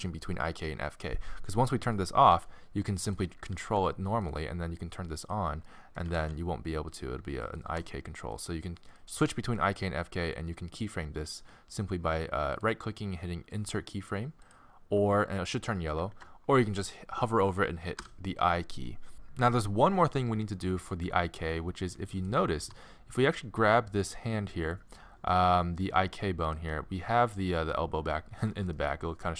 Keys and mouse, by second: 2.3 r, 3.5 r, 4.9-6.5 drag, 6.1 r, 7.7 g, 16.1 ctrl+z, 18.0 middle click, 18.0 i, 19.1-21.4 drag, 21.6 middle click, 22.2-24.1 drag, 22.6 g, 26.7-29.0 middle drag.